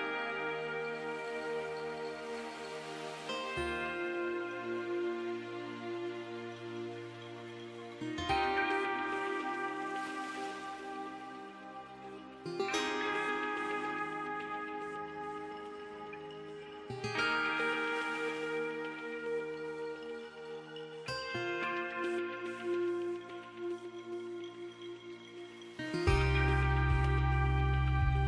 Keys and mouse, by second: 0.0 KP_Enter, 1.4-3.1 drag, 1.7 z, 3.2-5.8 right drag, 4.3 z, 5.8-7.8 middle drag, 6.7 Tab, 7.8 right click, 8.1 alt+h, 8.9 a, 11.7 shift+d, 12.1 click, 13.2 p, 13.9 Tab, 14.7 Tab, 15.5 a, 16.5 KP_1, 17.3 KP_Decimal, 19.1 s, 22.7 e, 24.9-25.9 drag, 25.1 z, 26.8 e.